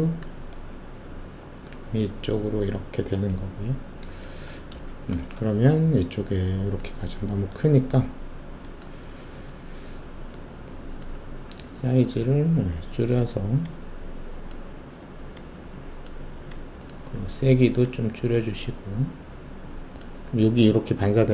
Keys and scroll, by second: 4.9 alt+shift+q.